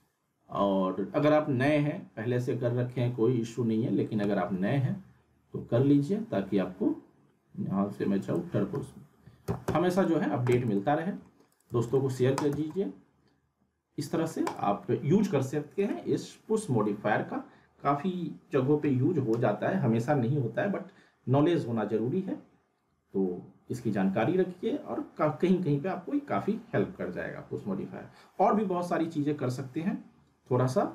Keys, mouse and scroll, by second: 0.5 e, 4.6 t, 8.2 click, 9.6 w, 10.0 click, 10.5 z, 10.8-11.4 alt+middle click, 11.5 click, 11.7 z, 11.9 alt+middle click, 12.3 click, 12.5 z, 12.7-14.3 alt+middle drag, 14.4 click.